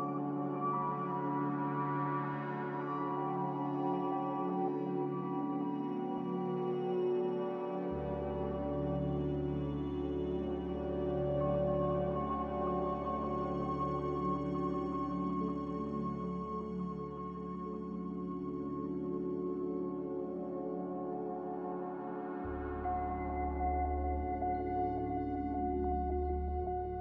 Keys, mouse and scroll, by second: 2.1 z, 4.4 4, 5.2 Return, 18.8 4, 19.1 Return, 19.3 Return, 20.4 ctrl+z, 20.7 ctrl+z, 21.7 c.